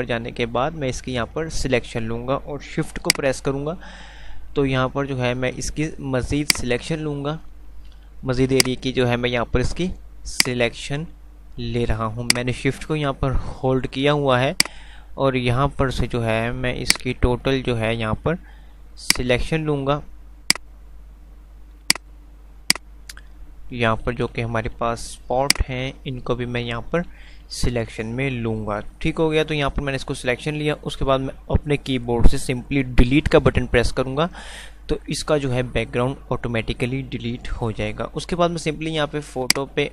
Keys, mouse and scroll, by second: 6.6 shift+click, 20.5 shift+click, 39.8 shift+click.